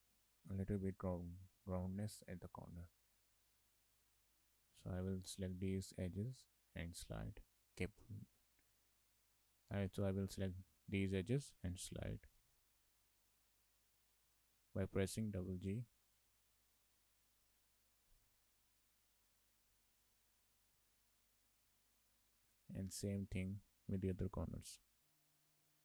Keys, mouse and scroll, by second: 0.6 shift+click, 3.5 click, 4.1 shift+middle click, 9.0 middle click, 9.8 middle click, 12.4 g, 14.5 shift+middle click, 16.1 click, 18.1 g, 20.7 scroll down 2, 20.8 shift+middle click, 23.5 shift+middle click, 25.0 click, 25.2 shift+click, 25.4 middle click, 25.5 scroll up 2, 25.6 shift+middle click.